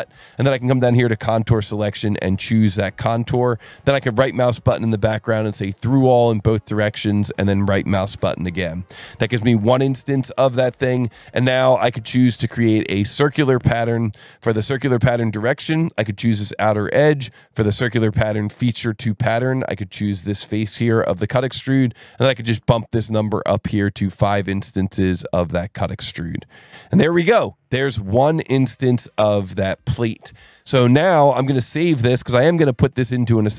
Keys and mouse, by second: 0.8 click, 2.2 click, 4.3 right click, 5.9 click, 7.4 right click, 8.2 click, 10.5 click, 12.6 click, 13.4 click, 14.6 click, 15.0 click, 16.3 click, 17.8 click, 19.3 click, 23.6 click, 25.1 click, 25.7 click, 29.9 click, 31.5 ctrl+s.